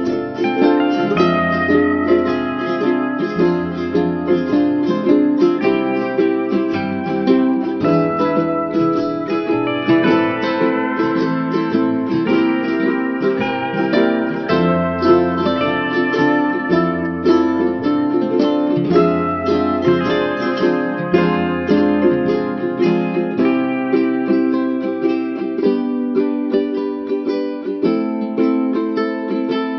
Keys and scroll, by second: 5.5 ctrl+alt+shift+n.